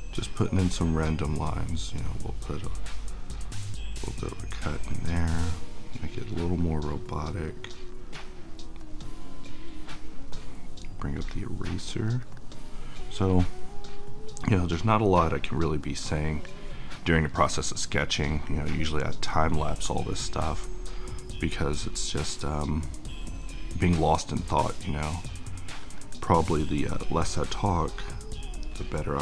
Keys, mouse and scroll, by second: 15.3-26.5 drag.